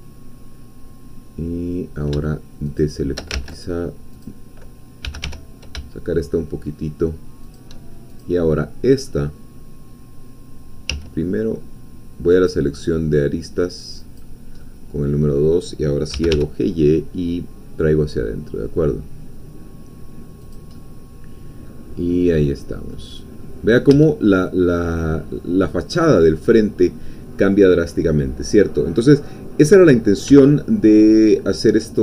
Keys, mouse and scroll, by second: 2.6 shift+click, 3.5 ctrl+shift+z, 4.2 click, 5.0 g, 5.3 y, 7.4 shift+click, 8.5 shift+middle click, 11.0 2, 12.3 click, 14.2 click, 14.6-15.7 middle drag, 16.1 g, 16.3 y, 20.4 click, 20.9 middle click, 22.1-24.0 middle drag, 23.9 Tab, 24.2 scroll up 1, 24.4-26.4 middle drag, 26.4-26.8 scroll down 2, 26.8-29.7 middle drag, 29.7-30.2 scroll up 2, 30.3 Tab, 30.6-32.0 middle drag.